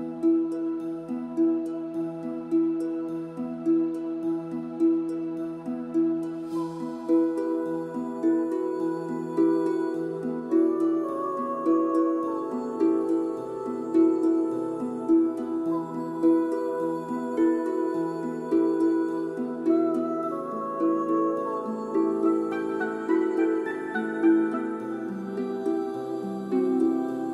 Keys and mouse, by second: 0.0-1.1 typing, 1.6 click, 2.7 KP_1, 3.0 KP_0, 3.9 middle drag, 4.5 shift+middle click, 5.5 click, 6.5 shift+d, 6.7 shift+z, 7.1 right click, 8.0 alt+r, 8.8-10.1 typing, 9.1 middle click, 9.8 right click, 10.5 click, 11.1 click, 12.3 click, 12.6 click, 13.4 click, 14.0 click, 15.0 KP_0, 15.6 KP_0, 15.7 g, 17.1 click, 18.3-19.4 drag, 19.4 g, 19.6 click, 22.5-27.3 drag.